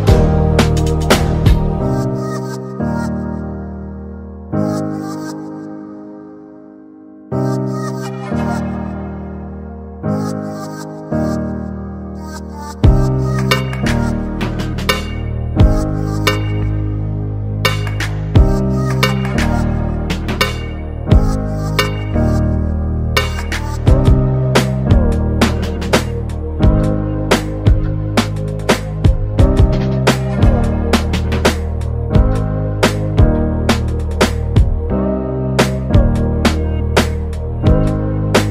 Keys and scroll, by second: 2.5-3.0 scroll, 24.3 BackSpace.